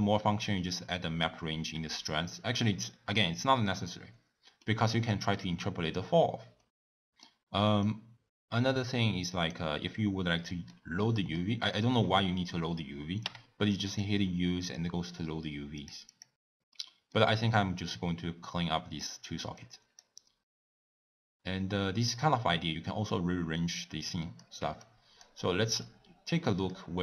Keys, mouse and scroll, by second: 13.8 u, 24.5 x, 26.1 click.